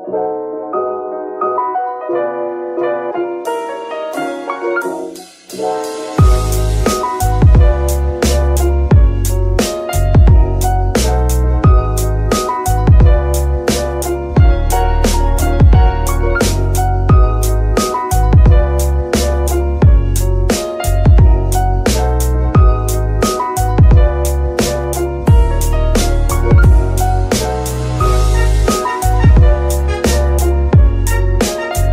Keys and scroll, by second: 3.0 Escape, 4.3 r, 4.4 r, 5.3 Escape, 12.8 KP_Divide.